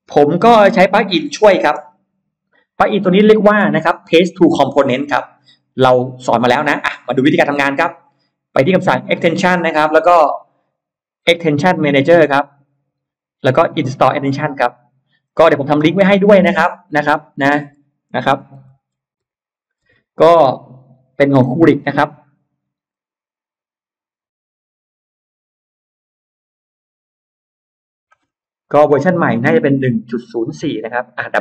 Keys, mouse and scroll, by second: 0.1-0.6 scroll up 2, 0.6-1.3 scroll up 2, 1.1 middle click, 1.3 scroll down 2, 1.7 scroll up 2, 1.9 middle click, 7.3 middle click, 8.9 click, 12.1 click, 14.2 click, 15.9 click, 16.9 click, 17.8-19.1 typing.